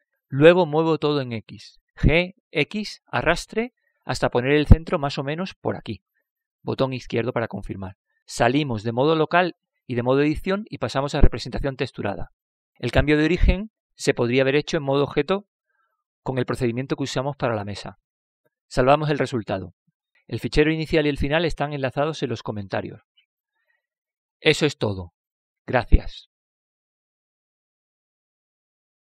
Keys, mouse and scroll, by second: 0.8 KP_7, 2.6-4.4 middle drag, 4.7 g, 12.6 KP_Divide, 12.6 Tab, 15.3-16.9 middle drag, 20.8 ctrl+s.